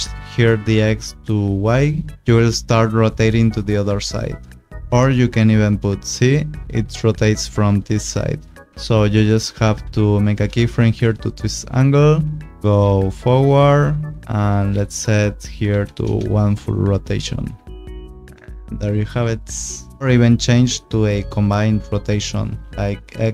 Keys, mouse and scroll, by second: 0.6 click, 1.6 click, 4.8 ctrl+z, 5.4 ctrl+click, 6.3 click, 10.2 click, 11.3 u, 14.2 click, 15.7 1, 16.0 Return, 17.0 click, 17.9 space, 22.2 click.